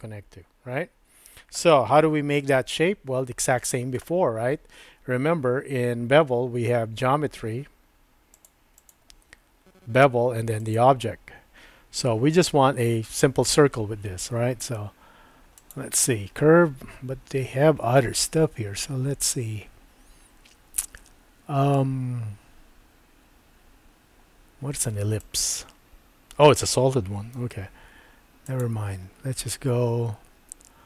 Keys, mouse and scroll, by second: 3.1 Tab, 8.4 click, 8.8 click, 10.6 click, 15.8-25.4 drag, 25.3 typing, 27.4 super+z, 28.4-30.8 drag.